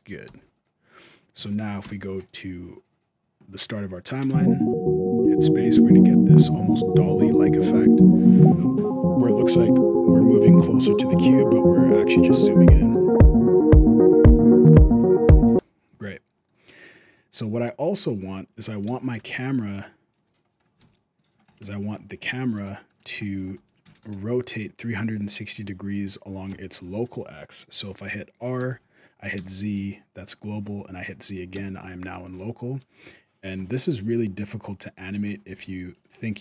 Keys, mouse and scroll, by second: 0.0 i, 1.6 shift+Left, 4.0 space, 15.2 space, 16.3 click, 16.9 click, 19.0 KP_0, 19.4 z, 20.2-21.4 scroll down 6, 20.6 alt+a, 20.7 middle click, 21.5 shift+middle click, 22.0-22.3 scroll up 2, 22.3 right click, 22.7 right click, 23.0 shift+middle click, 23.3 r, 28.4 r, 35.2 n, 36.0 middle click, 36.3 r.